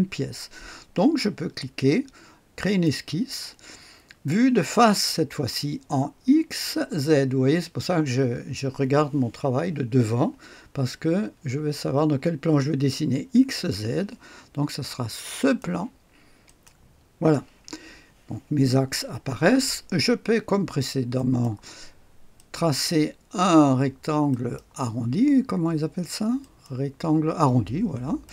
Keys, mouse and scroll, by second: 2.5 click, 15.3 click, 16.4 click, 21.1 click, 22.3 click, 24.2 click, 26.3 click, 28.2 right click.